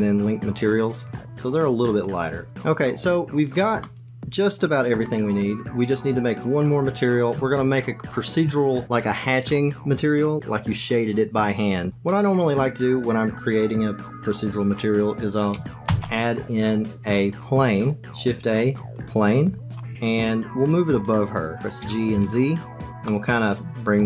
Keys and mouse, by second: 1.3 click, 2.5 shift+middle click, 3.7-4.9 middle drag, 15.8 shift+a, 19.7-20.9 middle drag, 21.7 g, 23.0-24.0 middle drag.